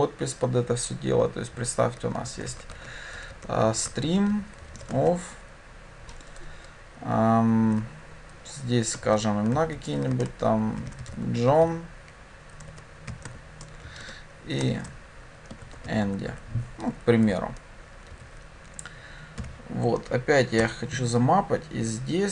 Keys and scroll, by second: 20.7 Return.